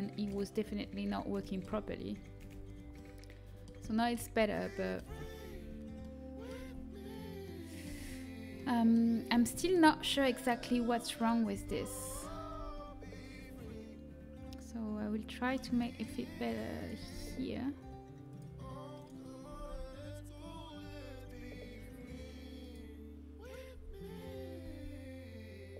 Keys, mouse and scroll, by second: 1.6 z, 2.3 z, 3.4 middle click, 4.8 middle click, 5.0 z, 5.4 z, 6.5 z, 7.8 z, 10.9 a, 11.5 z, 12.0 z, 12.4 g, 16.9 g, 19.4 g, 23.7 g.